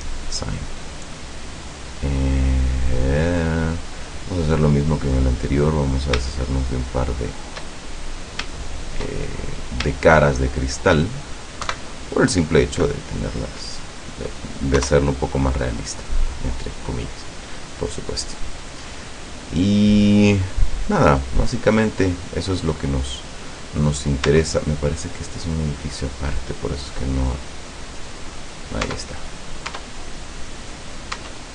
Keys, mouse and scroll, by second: 0.8-1.1 scroll down 2, 1.8 scroll down 2, 3.4 middle click, 4.4 middle click, 5.1-5.4 scroll up 2, 5.9 right click, 6.7 shift+right click, 7.4 shift+right click, 8.8 shift+right click, 9.4-10.5 shift+scroll down 4, 10.6 shift+right click, 11.7 Delete, 12.5 click, 14.8 KP_0, 15.8-16.5 scroll up 2, 19.6-20.0 scroll down 2, 20.2 scroll up 2, 20.5 scroll down 2, 21.3-21.6 scroll up 2, 24.3 Tab, 24.6 right click, 28.1 click, 28.9 Tab, 29.7 Tab, 31.2 Tab.